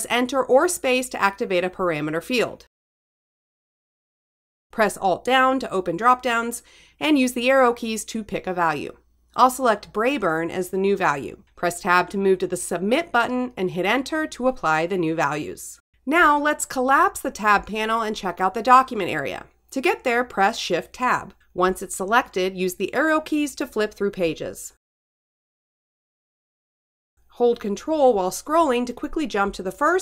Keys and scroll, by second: 1.9 Return, 2.9 Tab, 7.3 alt+Down, 10.3 Down, 11.0 Return, 11.9 Tab, 12.6 Return, 19.6 shift+Tab, 22.3 Up, 23.2 Return, 24.5 shift+Tab, 27.2 Right, 29.0 ctrl+Left.